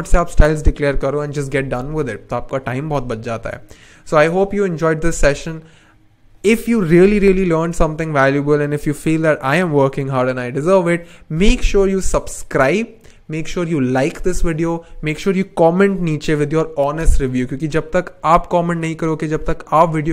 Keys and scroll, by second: 3.1 n.